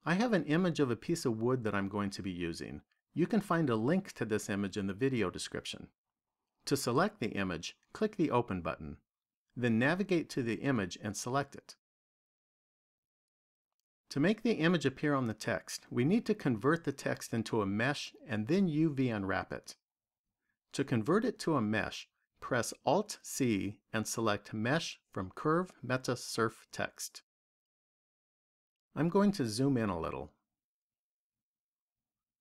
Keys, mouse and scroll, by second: 7.9 click, 13.7 click, 22.8 alt+c, 28.7-30.6 scroll up 4, 30.6 shift+middle click.